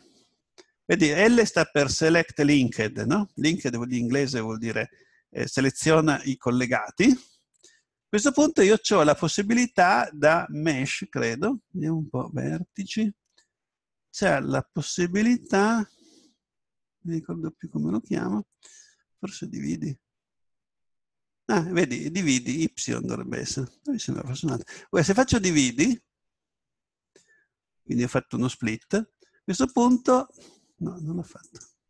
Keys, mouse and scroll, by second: 10.7-12.5 drag, 28.7 Tab, 29.9-31.8 right drag.